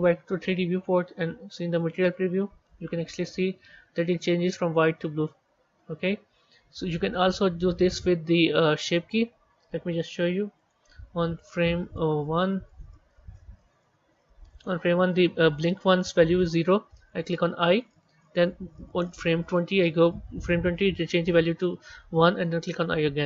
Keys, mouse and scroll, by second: 2.0 z, 3.3-6.3 drag, 11.8-17.0 drag, 19.3-22.6 drag.